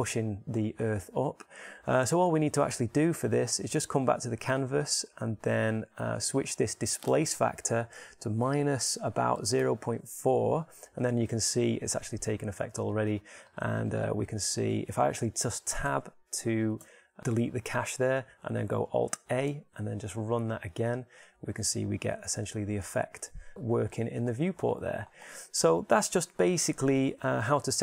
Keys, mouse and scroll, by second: 13.6-16.9 drag, 16.9 Tab, 17.2 Tab, 20.1 alt+a, 24.2 alt+a.